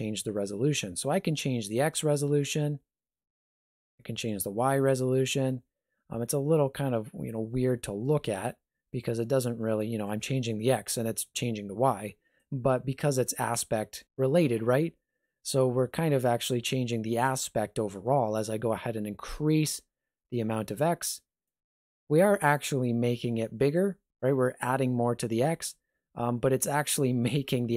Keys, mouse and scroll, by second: 1.7 click, 4.3 click, 8.0-10.1 scroll down 1, 10.1 click, 18.4 click.